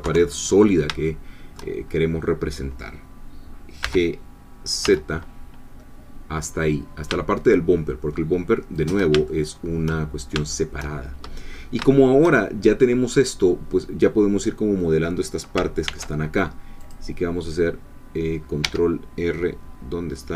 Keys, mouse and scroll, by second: 0.0 3, 1.0 shift+middle click, 1.8-3.8 shift+scroll up 1, 3.8 g, 4.8 z, 8.8 shift+click, 9.3 shift+middle click, 10.5 shift+middle click, 11.5 scroll up 2, 11.9 shift+middle click, 15.9 ctrl+r, 16.8 click, 18.6 Escape, 19.7-20.3 scroll down 2.